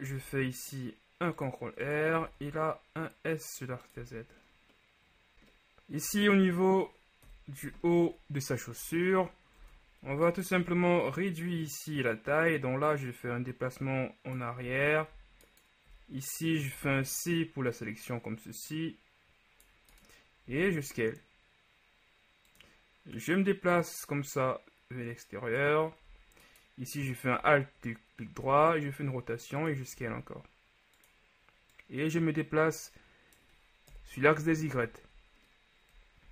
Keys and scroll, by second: 0.2 ctrl+r, 2.3 s, 2.5 z, 4.1 Tab, 7.3 KP_3, 9.7 ctrl+Tab, 10.2 ctrl+alt+Tab, 14.9 z, 16.9 c, 20.6 s, 28.5 r, 34.1 KP_1, 34.9 z.